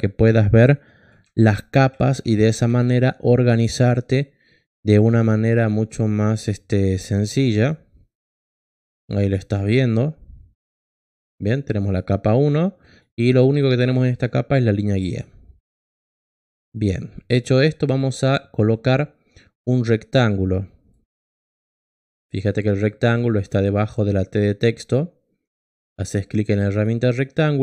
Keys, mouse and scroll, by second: 1.9-3.3 typing, 3.5 Return, 7.5 click, 11.6 click, 12.8 click, 14.5 click, 15.0 click, 26.7 click.